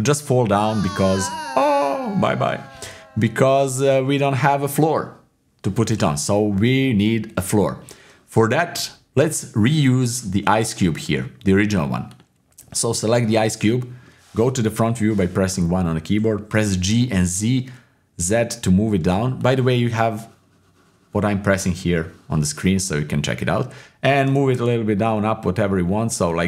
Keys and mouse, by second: 0.6 middle click, 3.4 click, 4.3-6.5 drag, 6.5-7.6 middle drag, 11.1-11.6 drag, 13.6-14.8 middle drag, 14.8 KP_1, 16.6 g, 24.3 g.